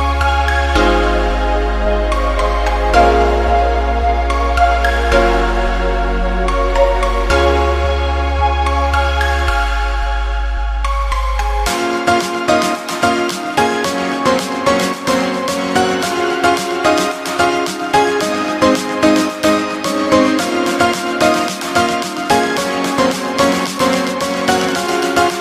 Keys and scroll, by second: 0.0 Delete.